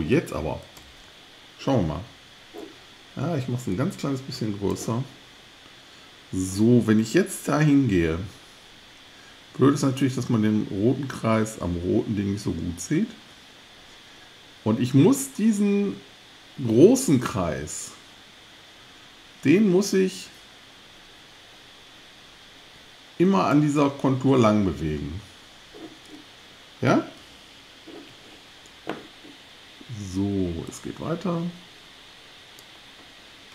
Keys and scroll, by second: 27.2 alt+Left.